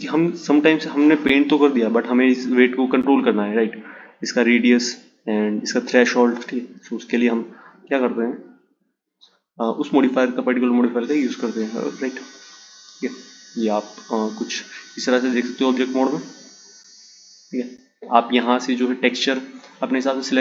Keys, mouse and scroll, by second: 6.7 click, 9.3-12.4 drag, 15.2-16.4 drag, 18.2-20.4 drag.